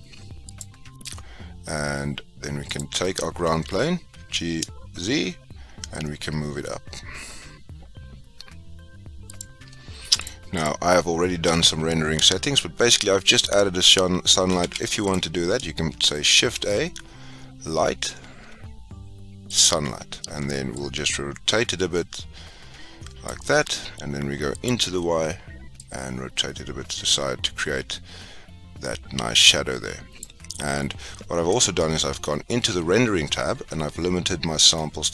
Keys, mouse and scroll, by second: 0.5 click, 2.7 click, 3.7 g, 10.8 click, 15.1 x, 16.6 shift+a, 20.9 click, 24.9 click, 26.0 click, 31.5-35.1 drag.